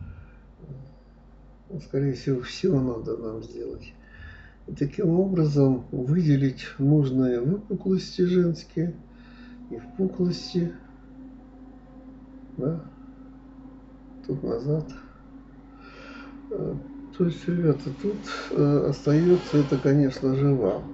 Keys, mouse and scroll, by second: 0.4 click, 0.8 click, 2.4 Escape, 2.6-3.8 middle drag, 3.8 g, 6.5-7.5 middle drag, 7.5 click, 7.7-8.9 middle drag, 8.9 g, 10.9-12.4 middle drag, 12.8 click, 13.6 click, 15.0 click, 15.2-16.7 middle drag, 17.9-19.4 middle drag, 20.1 click, 20.7 shift+click.